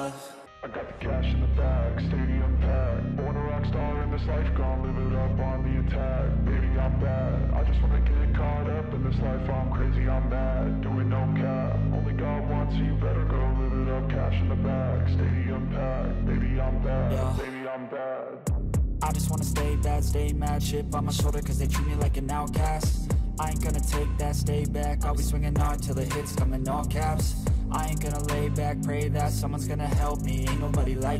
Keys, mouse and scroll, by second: 0.9 Return, 1.0 ctrl+a, 6.0-6.9 scroll down 10, 7.0-9.0 scroll up 21, 9.0-10.2 scroll up 18, 12.6-13.0 scroll down 4, 25.7 ctrl+a, 29.9 BackSpace.